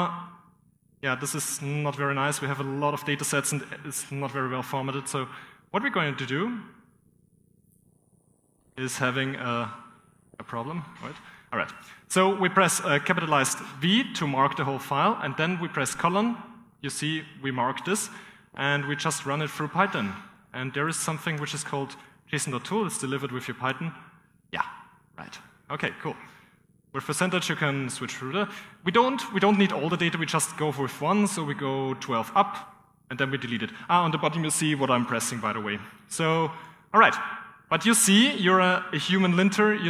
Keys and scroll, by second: 0.9-2.1 typing, 3.4-4.6 typing, 4.3 ctrl+6, 4.6 ctrl+[, 6.6 ctrl+[, 8.2 ctrl+[, 10.7 typing, 15.2 shift+v, 19.4-23.5 typing, 25.1 Escape, 28.2-28.7 typing, 29.8 y, 31.3-32.8 typing, 35.9 ctrl+[, 37.0 /, 38.5 ", 39.1 Return.